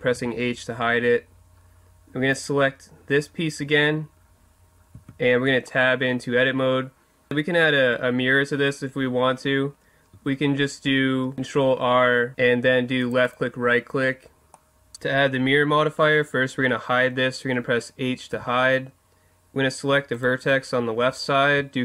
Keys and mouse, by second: 0.1 h, 2.3 right click, 4.9 Tab, 5.7-7.3 right drag, 11.3 ctrl+r, 13.3-14.5 drag, 14.5 middle click, 18.3 h, 20.1 right click.